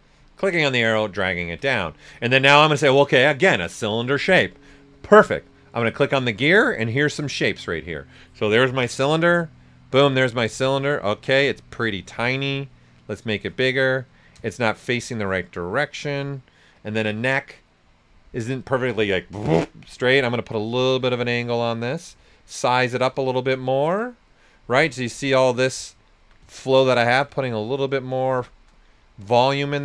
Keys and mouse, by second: 0.5-2.0 ctrl+drag, 2.0 right click, 5.8 click, 9.2 click, 10.1 right click, 11.7 w, 12.5-19.5 drag, 20.5-23.1 drag, 24.4-26.0 right drag, 27.1 click, 28.2 right click, 29.2-29.8 drag.